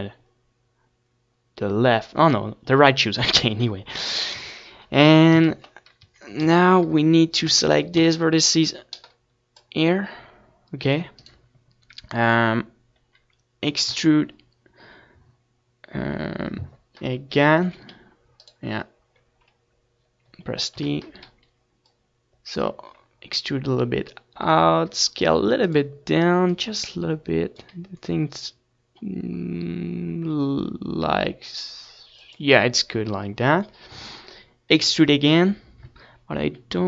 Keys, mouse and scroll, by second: 0.1 ctrl+s, 1.3 KP_1, 1.5 Tab, 1.9 a, 2.4 ctrl+s, 3.8 z, 3.9 c, 7.6-9.6 right drag, 14.4 e, 15.3 right click, 15.9-17.7 middle drag, 17.5 t, 18.7-20.2 drag, 20.2-22.9 middle drag, 22.9 s, 23.0-26.1 drag, 25.9 s, 30.4-32.6 drag.